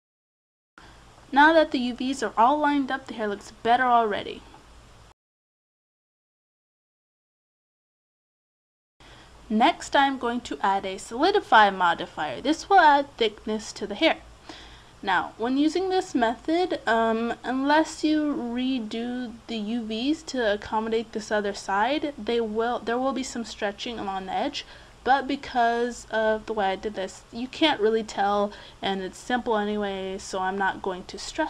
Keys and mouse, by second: 1.3 middle click, 2.5 middle click, 2.8 click, 3.7-5.5 middle drag, 4.4 a, 6.5 middle click, 8.1-10.7 drag, 13.0-14.7 drag, 18.2-19.4 drag, 19.4 middle click, 22.6-27.2 drag, 27.2-28.7 middle drag.